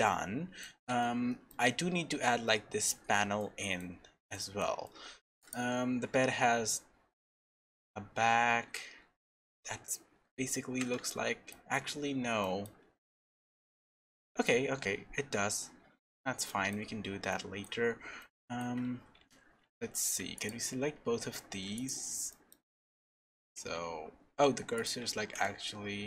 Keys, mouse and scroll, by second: 3.4 shift+middle click, 4.3 middle click, 4.8 shift+middle click, 5.4 click, 10.1 scroll up 2, 10.8 scroll up 6, 11.1 shift+middle click, 11.9-12.4 scroll down 2, 12.4 shift+middle click, 13.2-13.5 scroll down 2, 13.7 middle click, 14.7 scroll down 1, 15.4-15.9 scroll down 2, 16.5 shift+middle click, 17.3 middle click, 17.9-18.2 scroll up 2, 18.2 shift+middle click, 19.2 Tab, 19.9 click, 20.3 shift+click, 21.5 shift+s, 22.3 middle click, 22.5-23.0 scroll down 5, 23.0 middle click, 23.5 Tab, 23.9-24.2 scroll up 1, 24.4 scroll down 1, 24.8 click, 25.2 shift+s.